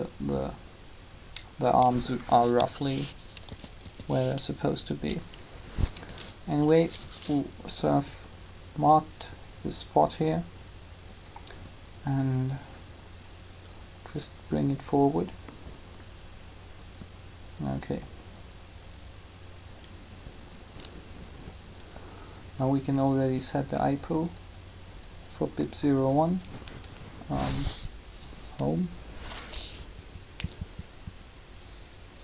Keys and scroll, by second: 3.4 typing, 28.3 Home.